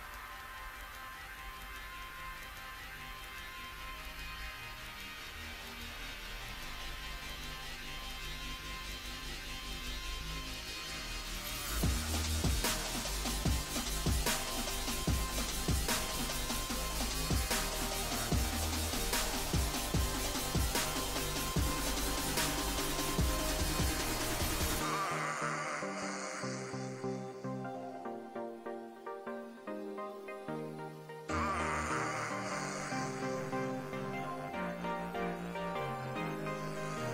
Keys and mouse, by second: 11.5 ctrl+r, 13.6 z, 15.3 z, 20.3-25.8 right drag, 22.3-23.3 drag, 24.7 s, 25.8 r, 28.9 s, 35.8 z, 36.5 z, 36.7 Tab.